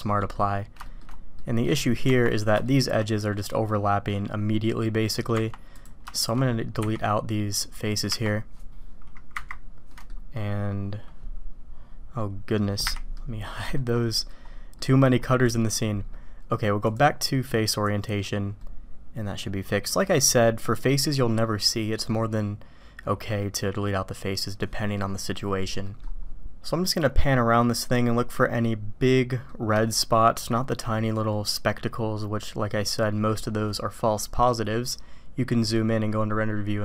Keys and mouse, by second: 0.2 drag, 0.8 shift+drag, 1.4 click, 2.6 shift+drag, 3.7-4.1 drag, 4.8 click, 5.8 click, 6.8 x, 8.0 Tab, 9.3 KP_Divide, 9.9 click, 11.0-12.6 middle drag, 12.6 click, 13.1-13.7 drag, 14.2 click, 14.8 click, 15.6 middle click, 16.9-18.5 drag, 18.6-19.2 middle drag, 19.2-19.9 drag, 19.2-19.9 right drag, 22.0-23.4 drag, 22.0-23.4 right drag, 25.8 drag, 25.8 right drag, 26.5-29.5 drag, 26.6-29.5 right drag, 29.9-30.3 shift+middle drag, 31.3-33.2 middle drag.